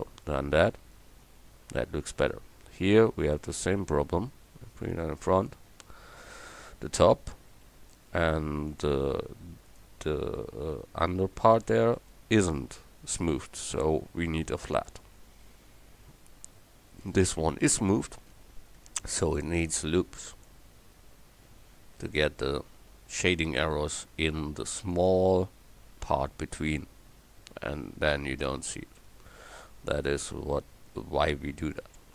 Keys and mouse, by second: 3.3-4.9 right drag, 6.8 Tab, 10.6-12.8 middle drag, 19.9 ctrl+r, 22.9 ctrl+r, 27.5 Tab, 29.1 KP_1, 30.6 ctrl+5.